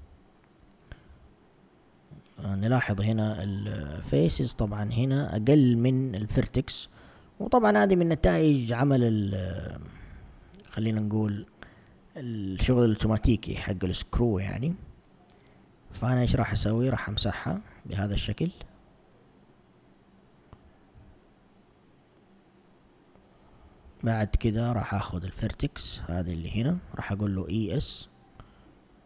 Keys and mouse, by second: 0.1 a, 1.1 z, 8.2 ctrl+Tab, 11.1 click, 11.7 shift+click, 12.3 click, 12.8 click, 13.3 click, 13.8 click, 14.4 shift+click, 15.0 shift+click, 15.6 shift+click, 16.3 shift+click, 16.9 shift+click, 17.7 shift+click, 18.3 shift+click, 18.8 shift+click, 19.4 shift+click, 20.0 shift+click, 21.0 x, 23.9 ctrl+Tab, 26.0 alt+click, 27.3 e.